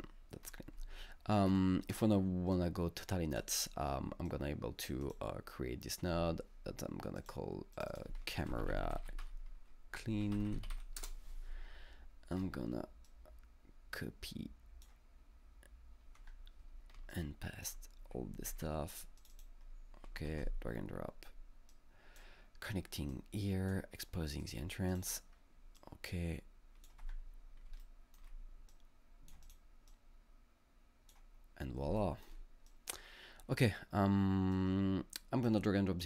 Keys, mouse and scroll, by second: 1.5-1.9 scroll up 2, 1.9-6.1 right drag, 4.3 click, 5.0 double click, 6.1 scroll up 2, 7.2 click, 7.7 click, 8.1-10.9 typing, 8.7 double click, 11.0 Return, 12.4-13.1 scroll down 2, 13.1-17.1 drag, 16.2 space, 17.1-20.3 shift+drag, 18.5 ctrl+x, 20.3 ctrl+v, 22.0-22.4 drag, 23.4 click, 24.9 click, 25.8-27.8 drag, 27.0 space, 27.8-32.0 alt+middle drag, 27.8 click, 27.8 space, 28.7 click, 29.4 double click, 29.9-34.5 drag, 34.5-36.0 drag.